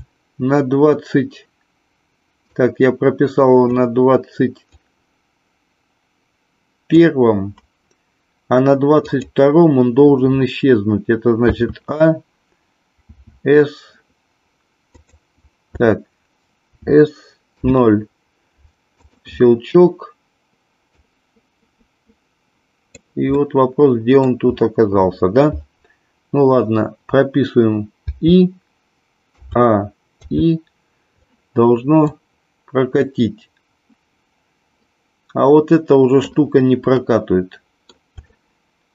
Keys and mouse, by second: 2.6-3.8 drag, 4.8-7.1 drag, 9.1 click, 11.4 a, 13.0 s, 16.7-17.5 s, 17.5 KP_0, 20.9-22.9 drag, 23.3 middle click, 28.0 i, 29.3 a, 30.2 i, 32.2-36.2 drag, 36.9 middle click, 38.2 shift+middle click.